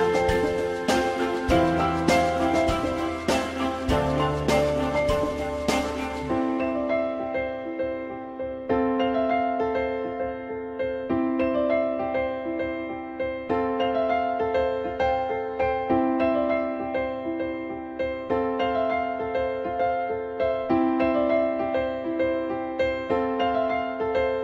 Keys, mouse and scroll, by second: 8.2 alt+x, 8.2 click, 8.7 click, 9.0 click, 9.8 alt+middle click, 12.5-13.2 typing, 15.8 alt+x, 19.1 alt+middle click, 21.5 alt+middle click.